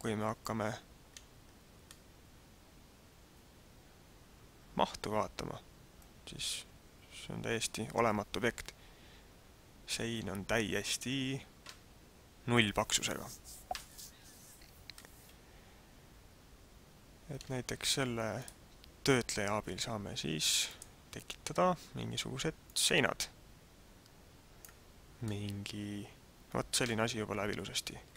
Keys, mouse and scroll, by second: 1.8 middle click, 15.1 middle click, 18.4 click, 22.6 click, 25.2 middle click.